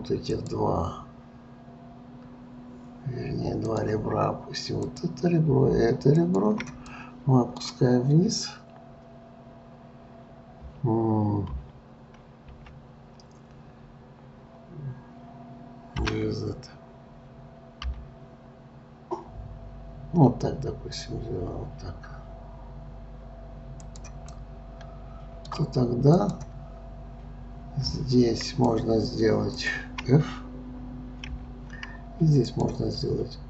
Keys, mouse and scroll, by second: 0.2 click, 3.7-5.0 drag, 6.1 shift+click, 6.9-10.0 middle drag, 11.5 KP_3, 12.5 KP_1, 16.0 g, 24.3-26.2 middle drag, 26.2 click, 28.4 click, 29.6 shift+click, 31.3 f, 32.5 click.